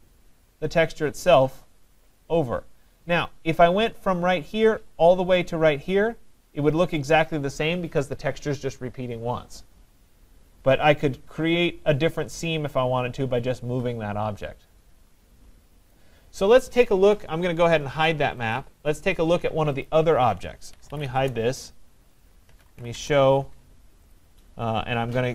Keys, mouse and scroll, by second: 15.9 click, 18.6 click, 19.9 click, 20.5-24.9 typing, 24.1 click.